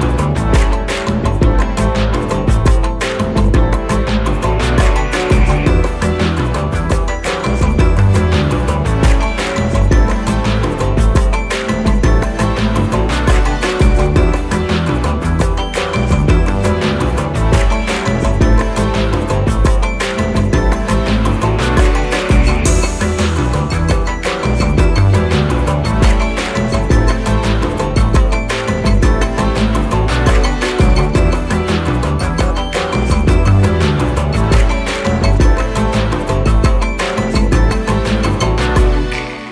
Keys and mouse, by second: 15.1 i, 15.9 click, 21.3 click, 23.6 click, 24.1-26.7 shift+drag, 35.4-36.6 drag, 37.7 right click.